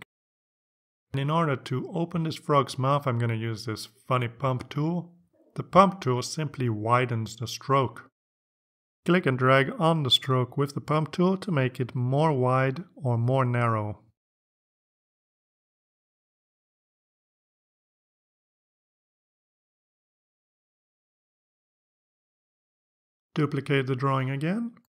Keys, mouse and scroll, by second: 6.9 click, 10.2 click, 10.8-22.0 drag, 23.2 click, 24.3 right click.